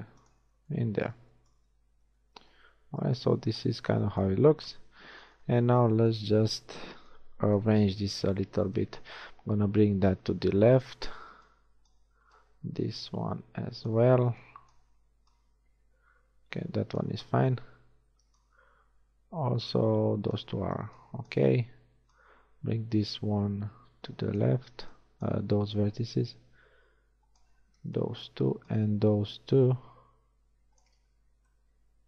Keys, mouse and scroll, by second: 2.0 z, 4.7 KP_1, 5.0 z, 5.7 a, 7.5 b, 8.8 click, 11.3 a, 11.5 b, 14.2 a, 14.3 b, 17.3 a, 18.3 b, 20.8 b, 24.7 a, 24.9 b, 25.8 click, 27.7 a, 27.9 b, 31.2 z, 31.6 middle click.